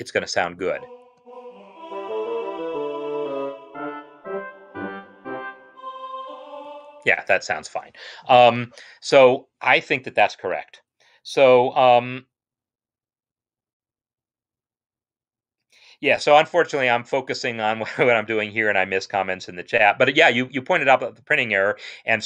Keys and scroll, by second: 1.0 space, 6.6 space.